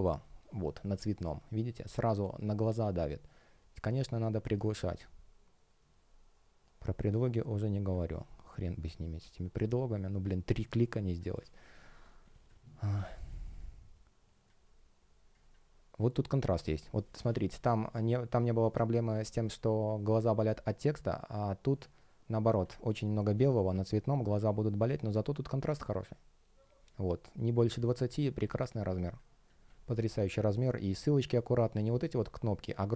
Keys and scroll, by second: 11.9 space.